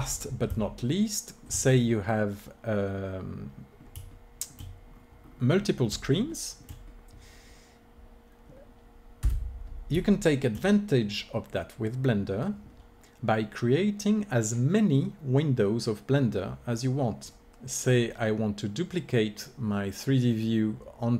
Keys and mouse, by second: 1.3-9.2 middle drag, 9.2 n, 10.1-11.1 middle drag.